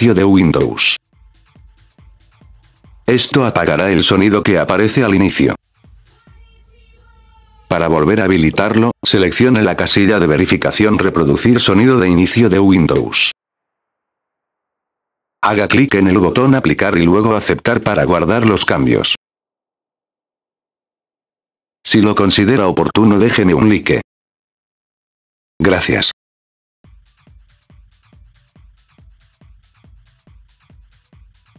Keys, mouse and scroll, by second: 0.1 click, 0.7 click, 1.3 click, 1.7 click, 2.3 click, 2.8 click, 2.8 right click, 4.1 click, 4.1 right click, 4.6 click, 4.6 right click, 5.9 click, 12.4 click, 12.8 click, 13.3 click, 13.3 right click, 13.6 click, 13.6 right click, 17.2 click, 20.4 click, 20.4 right click.